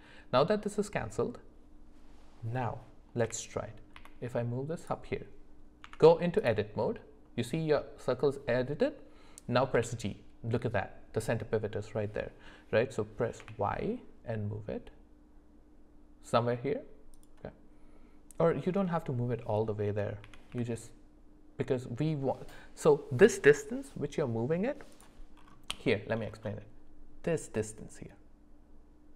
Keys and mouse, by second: 3.2 g, 5.8 Tab, 9.7 g, 20.2 g, 25.8 shift+middle click.